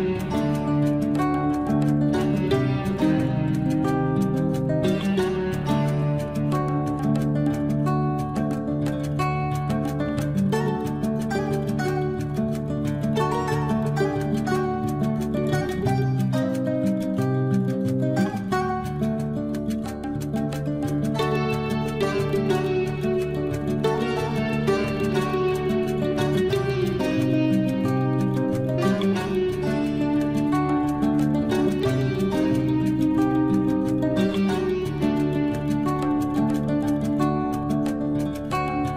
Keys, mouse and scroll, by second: 6.5 t, 6.8 scroll up 1, 7.3 click, 8.7 9, 9.0 Return, 11.3 scroll up 1, 11.6 space, 12.4 l, 12.6 scroll up 1, 13.4 click, 14.4 space, 17.6 t, 18.3 Escape, 18.5-18.9 scroll down 1, 18.9 space, 19.1 scroll down 1, 19.5 click, 20.6 Delete, 21.0 scroll up 1, 21.7 click, 22.3 Delete, 22.4 scroll down 1, 24.1 ctrl+z, 24.6 scroll up 1, 25.6 click, 26.6 Delete, 28.3 click, 28.7 Delete, 29.2 scroll down 1, 30.0 click, 30.5 Delete, 30.7 scroll down 1, 31.0 click, 31.7 Delete, 31.9 scroll down 1, 33.0 scroll up 1, 34.6 click, 35.2-35.6 scroll up 1, 36.0 middle click, 36.8 scroll down 1.